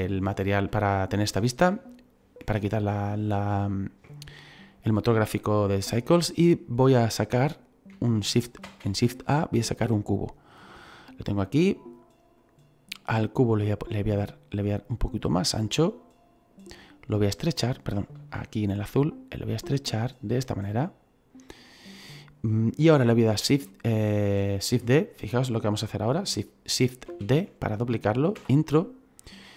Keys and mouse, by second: 0.2 middle click, 1.3 shift+middle click, 8.6 shift+a, 9.8 click, 11.4 click, 14.0 click, 17.1 click, 18.1 ctrl+z, 18.6 click, 27.0 shift+d, 28.3 Return, 28.3 KP_Enter.